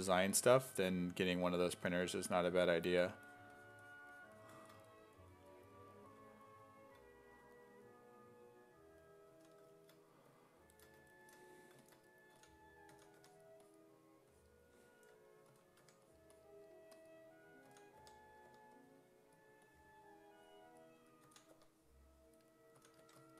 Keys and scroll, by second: 0.0-2.1 typing, 9.3 s, 12.3 s, 12.9 s, 13.2 1, 15.5 s, 15.8 1, 17.5-19.0 typing, 21.3-23.3 typing.